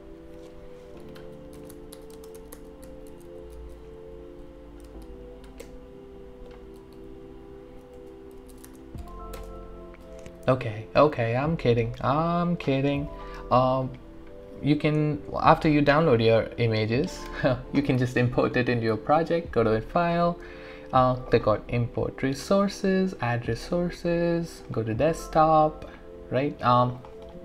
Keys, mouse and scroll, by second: 0.1 click, 10.0 Return, 10.2-12.9 alt+drag, 19.4 click, 27.0 click.